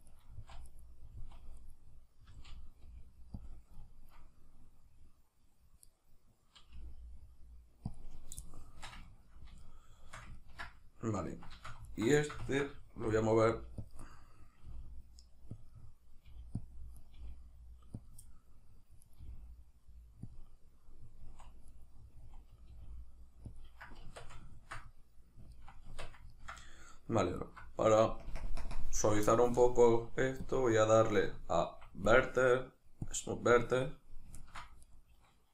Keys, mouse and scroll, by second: 0.0 right click, 0.3 z, 0.7 right click, 1.1 z, 1.6 right click, 2.3 z, 3.5 click, 3.9-5.9 ctrl+middle drag, 5.9 right click, 6.7 g, 8.0 click, 8.5-11.9 shift+middle drag, 11.9 alt+right click, 12.2-13.9 ctrl+shift+middle drag, 13.1 g, 13.9 click, 14.1-15.7 middle drag, 14.7 g, 15.7 click, 15.7 middle click, 16.3 g, 16.7 click, 17.0 right click, 17.2 g, 18.1 click, 18.3-19.1 middle drag, 19.1 right click, 19.2 g, 20.4 click, 21.2 z, 21.7 right click, 22.1 z, 23.6 click, 24.1 Tab, 24.5-27.4 ctrl+middle drag, 25.8 Tab, 27.4 alt+right drag, 28.2 ctrl+KP_Add, 28.6 ctrl+KP_Subtract, 30.4-34.4 drag, 31.6 Escape, 34.4 ctrl+middle click, 34.9 right click.